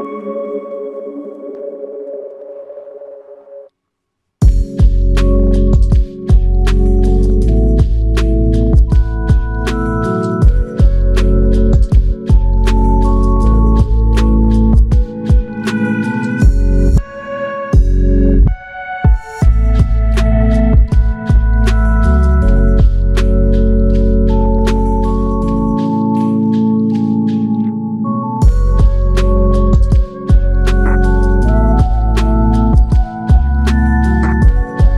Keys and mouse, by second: 1.7 alt+click, 7.0 shift+click, 9.3 alt+click, 18.2 alt+click, 20.0 double click, 22.8 shift+click, 24.0 alt+click, 27.2 alt+click, 32.8 alt+click.